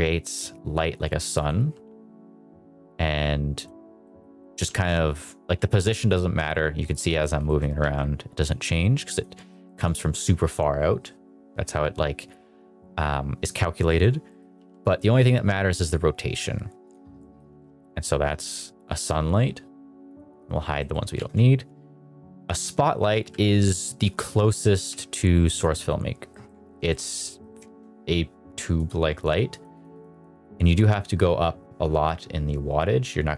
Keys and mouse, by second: 0.8 click, 1.0 g, 1.3 click, 1.4 r, 3.5 click, 3.9 middle click, 4.3 middle click, 5.2 click, 5.5 g, 6.9 click, 7.1 middle drag, 7.4 shift+middle click, 7.7 g, 8.3 click, 8.7 r, 9.4 middle click, 13.8 middle drag, 14.2 middle click, 14.5 r, 16.7 click, 17.1 middle click, 17.4 r, 18.8 click, 20.0 click, 20.2 click, 20.7 middle click, 21.0 shift+a, 23.1 g, 23.9 click, 24.6 g, 26.2 middle click, 26.8 shift+middle click, 27.2 middle drag, 28.6 click, 29.2 click, 29.4 click, 29.6 click, 29.8 click, 30.0 click, 30.2 click, 30.4 click, 30.6 click.